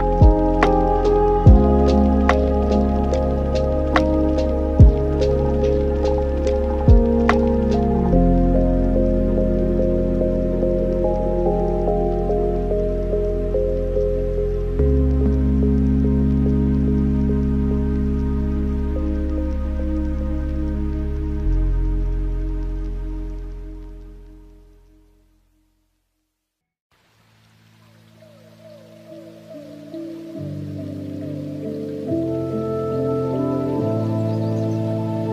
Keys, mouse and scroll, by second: 0.3 shift+a, 4.7-6.2 scroll down 3, 6.2 click, 6.9 shift+a, 10.8-11.7 alt+right drag, 11.7-12.1 scroll down 5, 12.1-12.8 middle drag, 12.8 drag, 13.9 click, 15.0-15.5 scroll up 5, 15.5-16.3 middle drag, 16.3 click, 17.2 middle click, 17.6-19.1 scroll up 6, 19.1 click, 22.4-23.0 scroll up 8, 23.7-24.8 middle drag, 24.8-27.9 drag, 28.0-31.1 drag, 31.6 scroll down 5, 32.0-32.5 middle drag, 32.6-33.6 scroll down 6, 33.6-34.4 scroll down 3, 34.4-35.3 alt+right drag.